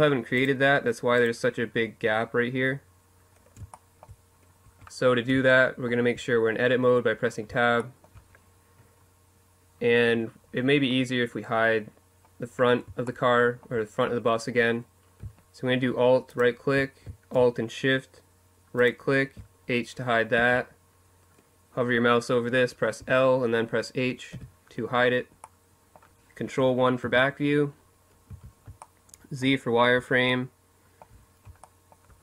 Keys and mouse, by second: 2.4 middle click, 3.4 Tab, 6.5-8.4 middle drag, 8.8-13.7 middle drag, 15.0-16.9 right drag, 17.5-21.7 right drag, 19.1 h, 21.7 l, 23.1 h, 24.1-25.8 middle drag, 27.0 z, 29.2 middle click, 29.6 middle click.